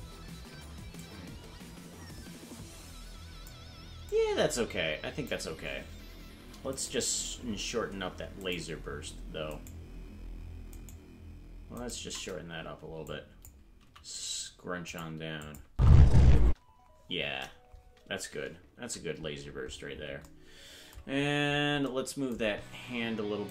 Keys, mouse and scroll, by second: 1.0-3.6 drag, 4.1-5.3 drag, 6.7 right click, 8.4 shift+right click, 9.5 shift+right click, 10.7 shift+right click, 11.7 shift+right click, 13.1 click, 13.8 s, 15.4 click, 15.7 space, 16.5 space, 18.8 KP_Decimal, 19.3-20.1 scroll down 16, 21.1-21.7 scroll down 3, 22.7 ctrl+Tab.